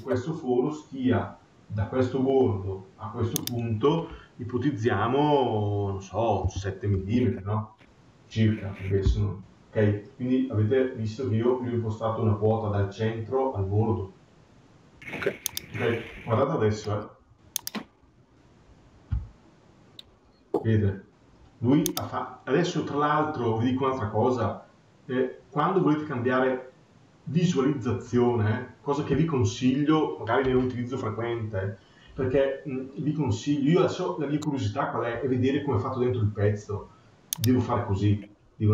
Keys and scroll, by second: 6.7 Return.